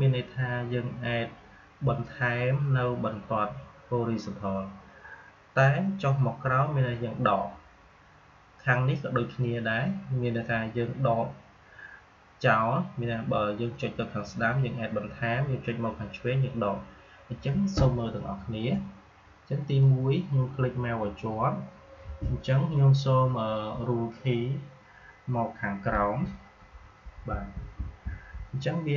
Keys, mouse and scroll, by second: 19.7-26.5 drag, 26.5 Down.